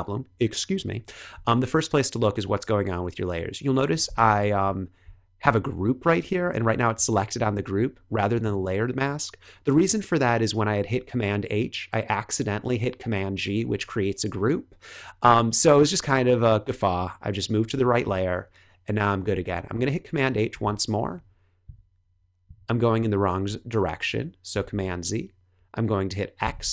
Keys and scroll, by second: 20.4 super+h, 24.5 super+z, 26.4 x.